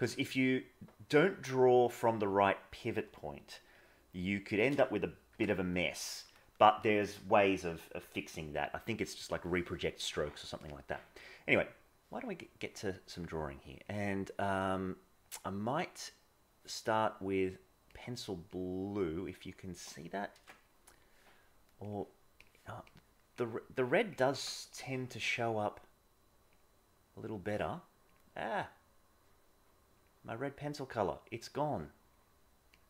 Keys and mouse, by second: 5.3 KP_0, 13.9-18.0 drag, 18.6 click, 20.3 ctrl+z, 21.9 click, 22.8 click, 24.3 ctrl+z, 26.5 click.